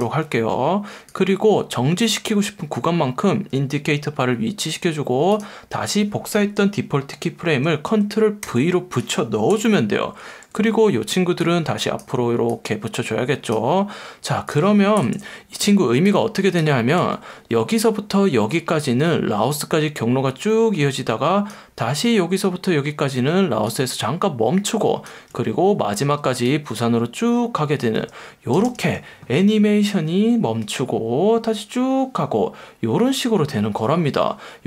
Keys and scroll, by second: 19.7 F1, 21.8 F1, 23.2 F1, 25.3 F1, 28.7 space, 34.1 space.